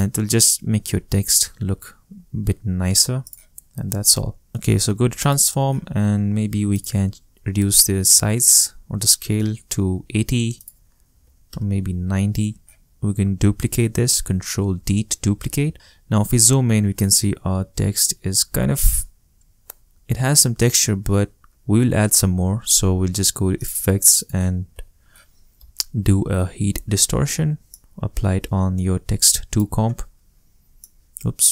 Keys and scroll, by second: 7.7-9.1 typing, 9.3 Return, 10.8-11.7 typing, 15.6 super+d, 24.7-27.1 typing.